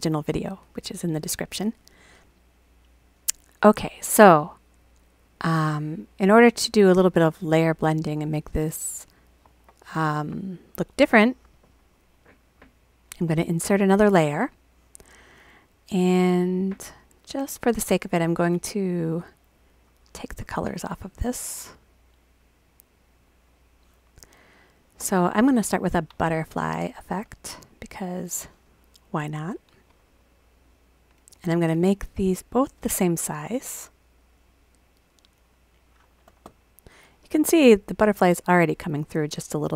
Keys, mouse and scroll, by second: 5.4 click, 11.6 click, 12.1 right click, 13.4 click, 16.6 click, 18.3 click, 19.0 click, 19.5 click, 21.6 click, 28.2-29.8 drag, 31.4 click, 31.9 right click, 35.4 click.